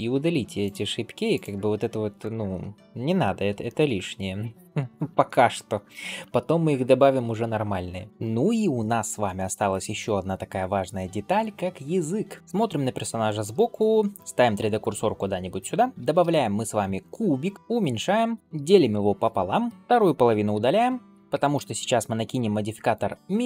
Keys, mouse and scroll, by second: 0.5 click, 1.2 click, 2.7 ctrl+space, 3.2-3.5 scroll down 2, 3.5 shift+middle click, 3.9 scroll up 1, 4.6 ctrl+s, 12.4 shift+middle click, 12.4-13.4 scroll down 1, 15.2 shift+right click, 15.9 shift+a, 17.5 s, 18.4 ctrl+Tab, 18.8 ctrl+r, 19.7 alt+z, 19.7 middle click, 19.7 click, 20.4 x, 21.2 Tab, 22.1-22.8 drag.